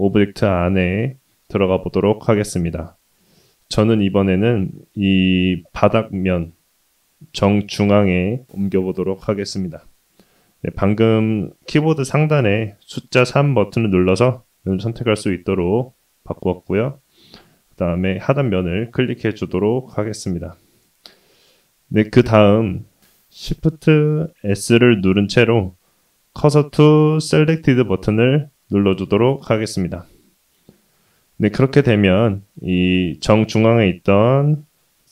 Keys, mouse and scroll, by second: 3.9 middle click, 5.3-6.0 scroll up 1, 6.0 click, 6.8 4, 7.1 3, 7.5 click, 13.8 3, 15.9 middle click, 17.3 click, 19.3 click, 19.9-21.9 middle drag, 24.4 shift+s, 31.2-32.6 middle drag, 32.7-34.2 scroll down 1.